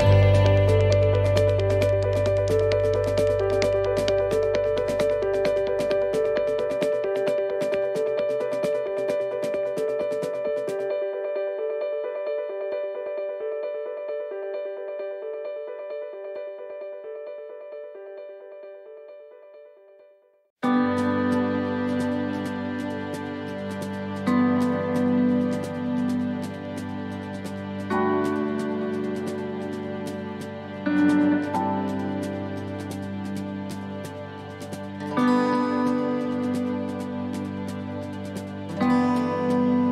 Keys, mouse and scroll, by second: 1.0 shift+middle click, 1.7 right click, 2.2-2.6 scroll down 2, 2.6 shift+middle click, 3.0 scroll up 2, 4.9 click, 23.9 click, 25.3 click, 27.8 click, 30.2 click, 30.9 click, 33.4 right click, 34.8 click, 35.4 click, 36.1 click, 37.0 click, 37.5 click.